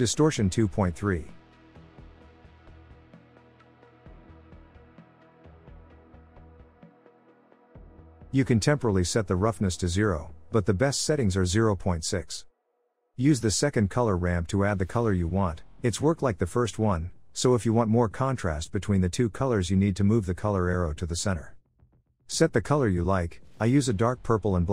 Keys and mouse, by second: 0.4-2.5 drag, 7.7-8.9 drag, 13.8-16.3 drag, 17.2-18.4 drag.